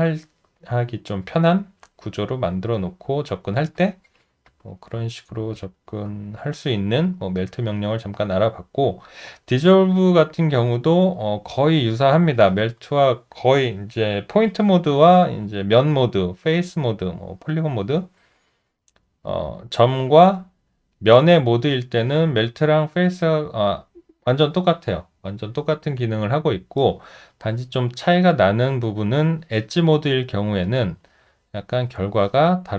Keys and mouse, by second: 4.2 shift+z, 5.5 shift+z, 7.2 alt+right click, 7.8 alt+middle click, 8.9 alt+click, 9.4 alt+middle click, 10.6 alt+click, 11.7 alt+middle click, 17.2 alt+middle click, 31.5 alt+middle click.